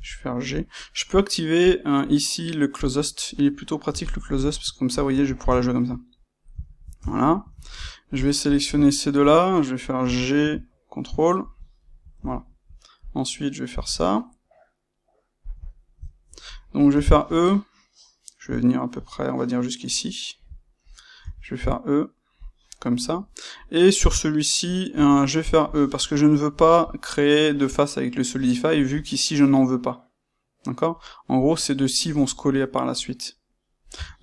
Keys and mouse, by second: 0.5 click, 1.5-4.9 drag, 3.8 g, 5.3-8.4 ctrl+shift+middle drag, 6.9 Tab, 8.4 shift+click, 8.8-11.4 ctrl+middle drag, 9.9 g, 11.4 ctrl+click, 11.7-12.9 ctrl+middle drag, 12.9 click, 13.7 g, 15.5 click, 15.6-19.8 shift+middle drag, 16.8 e, 19.8 ctrl+click, 21.1 e, 22.4 click, 24.8 e, 25.7 click, 25.8-34.2 middle drag, 33.9 Tab.